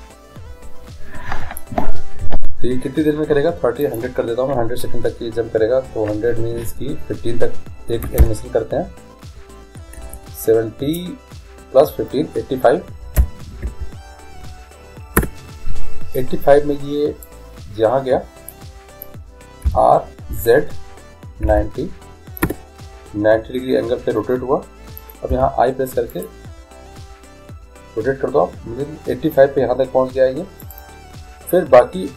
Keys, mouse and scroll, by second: 4.0-5.9 drag, 10.3 BackSpace, 17.4-19.3 drag, 19.9 r, 25.4 i, 30.7-32.1 drag.